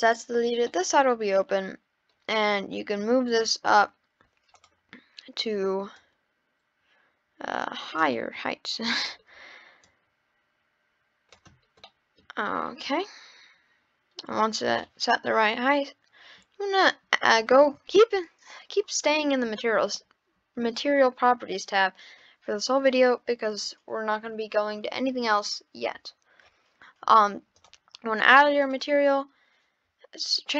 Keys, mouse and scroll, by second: 0.6-1.9 middle drag, 1.9 scroll up 3, 2.9 click, 4.0-4.5 scroll down 3, 4.5 click, 6.0 click, 8.1 scroll up 1, 8.1-9.8 middle drag, 9.8 click, 11.6 scroll down 1, 11.8-12.5 middle drag, 12.5-12.9 scroll up 3, 12.9-16.0 middle drag, 27.5-28.7 drag.